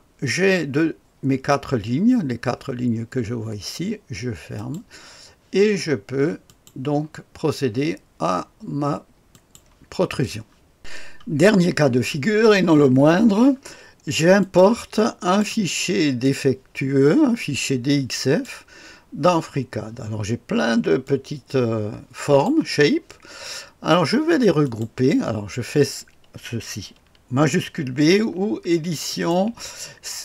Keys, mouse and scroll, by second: 4.5 click, 6.4 click, 9.3 click, 14.4 click, 15.2 click, 16.2-18.4 drag, 21.0-22.4 drag, 24.6 click, 25.2-29.1 scroll down 1, 29.1 click.